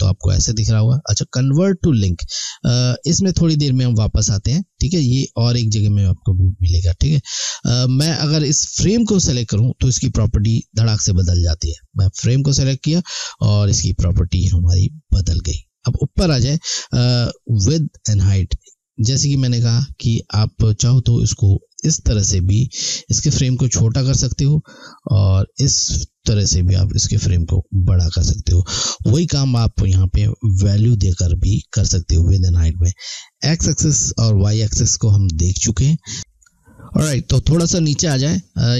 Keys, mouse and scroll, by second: 10.7 click, 21.9 click.